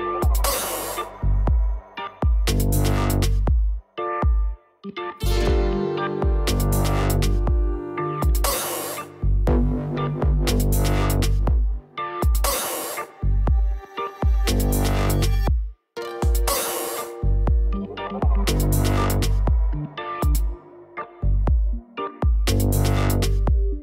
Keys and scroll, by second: 6.6 ctrl+s.